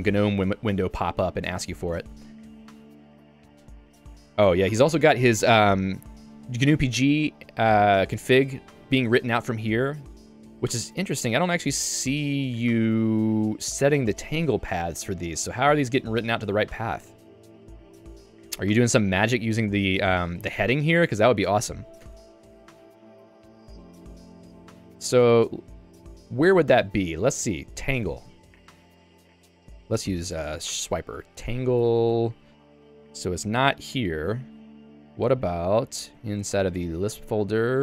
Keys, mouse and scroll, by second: 1.7 ctrl+d, 2.2 j, 2.8 k, 3.2 ctrl+d, 4.4 ctrl+u, 5.0 k, 7.0 j, 7.3 k, 8.1 j, 10.6 k, 12.7 j, 14.8 k, 18.7 j, 22.0 Escape, 23.1 k, 24.7 j, 27.5-28.5 typing, 28.5 Return, 34.5 ctrl+g, 35.0 super+e, 35.9-37.8 typing.